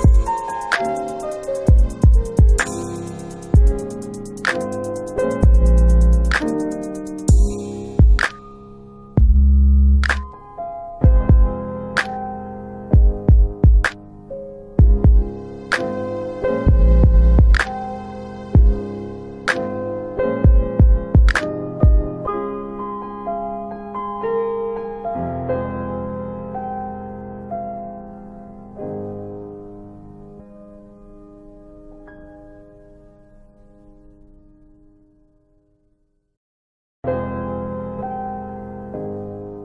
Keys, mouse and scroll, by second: 1.6 click, 5.9 alt+click, 6.4 alt+click, 6.5 alt+middle click, 6.6 alt+middle click, 8.2 alt+middle click, 9.2 f, 11.3 typing, 13.0 scroll up 1, 13.6 scroll down 1, 14.4 alt+click, 14.8 alt+middle click, 15.2 alt+middle click, 15.7 alt+click, 17.0 alt+click, 17.4 alt+middle click, 17.6 alt+middle click, 17.9 alt+right click, 18.6 click, 19.2 alt+middle click, 19.4 alt+middle click, 20.3 click, 21.1 alt+click, 21.1 alt+click, 21.7 alt+middle click, 23.2 alt+click, 23.5 alt+click, 26.4 alt+click, 26.8 alt+click, 28.0 alt+click, 28.9 click, 30.2 click, 33.6 click, 34.5 alt+click, 36.0 alt+click, 36.7 alt+click, 37.8 shift+click, 39.5 shift+click.